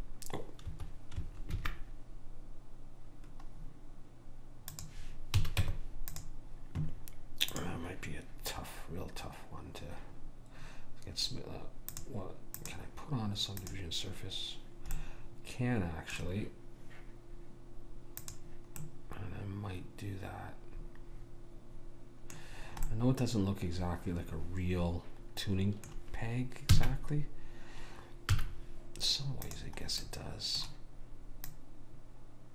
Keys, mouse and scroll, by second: 1.6 ctrl+b, 5.4 a, 5.7 Tab, 7.6 click, 15.1-17.1 middle drag, 18.3 click, 18.9-20.0 middle drag, 20.2 middle click, 23.0 middle click, 26.8 s, 30.3-32.1 middle drag, 31.6 click.